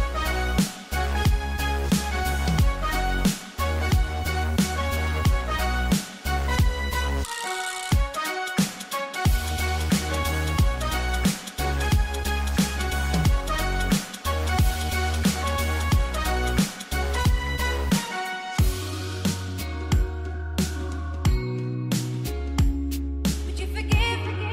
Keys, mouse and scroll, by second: 1.0 click, 2.1 space, 2.2 click, 2.6 space, 4.7 click, 8.0 click, 9.9-14.2 typing, 10.1 click, 11.0-11.5 scroll up 1, 13.5 click, 14.4 click, 15.5-16.1 typing, 15.6 click, 16.3 click, 17.4-18.1 scroll down 2, 17.6 [, 18.1 scroll up 1, 18.4 click, 19.3 ], 19.5 click, 19.8-20.2 scroll down 1, 20.2-20.9 scroll up 3, 20.5-23.4 typing, 22.2 click, 23.4 click, 24.0 scroll down 1.